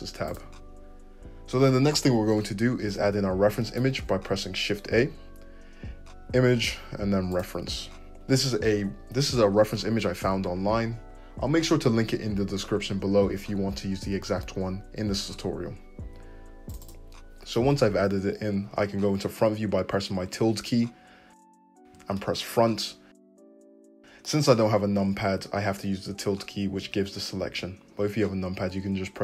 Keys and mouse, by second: 4.8 shift+a, 20.3 `, 26.8 `, 27.4 `.